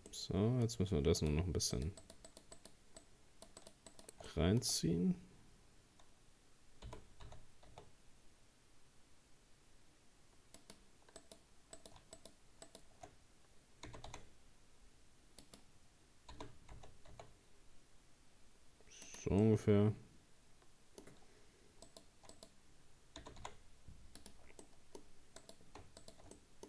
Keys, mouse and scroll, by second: 0.1-1.2 middle drag, 1.2 right click, 1.8 shift+right click, 2.0 shift+right click, 2.3 shift+right click, 2.6 shift+right click, 3.0 shift+right click, 3.6 shift+right click, 3.9 shift+right click, 4.3-6.9 middle drag, 6.9 g, 11.2 right click, 11.8 right click, 12.2 shift+right click, 12.7 shift+right click, 13.9 g, 16.3 g, 19.4-21.9 middle drag, 21.9 right click, 22.3 right click, 23.2 g, 24.6 middle click, 25.4 right click, 26.0 shift+right click, 26.4 middle click.